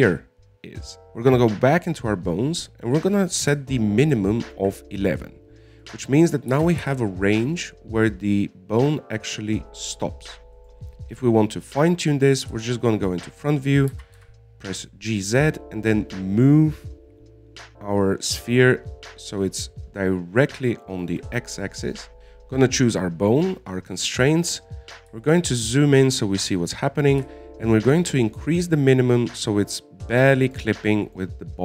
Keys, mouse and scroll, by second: 0.8-2.0 scroll up 3, 2.0 right click, 4.1-7.1 drag, 7.2 right click, 7.9 g, 13.9 KP_1, 14.8-15.3 scroll up 1, 15.3 g, 22.2 right click, 22.8 click, 26.2-26.6 scroll up 2, 26.6-28.5 shift+middle drag, 28.5-31.5 drag.